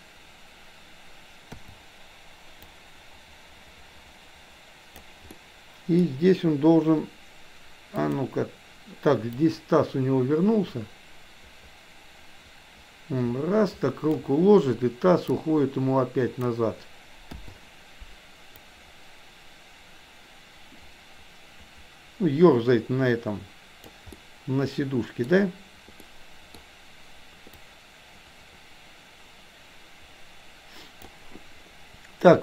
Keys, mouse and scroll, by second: 1.5 i, 2.7-4.9 drag, 5.4-6.0 middle drag, 8.0 click, 9.4-14.2 drag, 15.2-16.5 drag, 17.3 i, 18.5-23.9 drag, 24.2-25.3 middle drag, 26.0-26.5 middle drag, 27.5-31.0 drag.